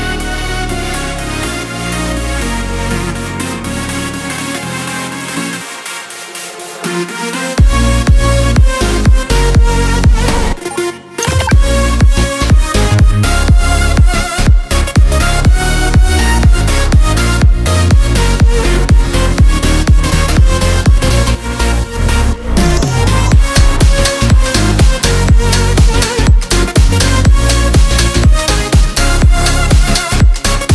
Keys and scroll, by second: 11.5 r, 13.6 v, 15.2 8, 15.6 Return, 16.3 v, 19.0 7, 21.2 s, 22.3 Return, 24.9 ctrl+s, 30.0 ctrl+s.